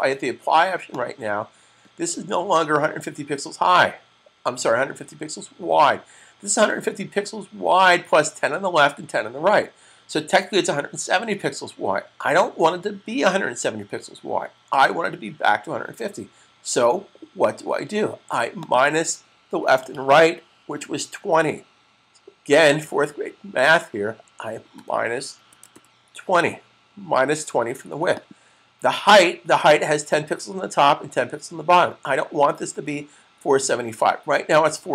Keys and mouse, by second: 0.8 click, 18.3 click, 24.7-26.0 typing, 28.1 click.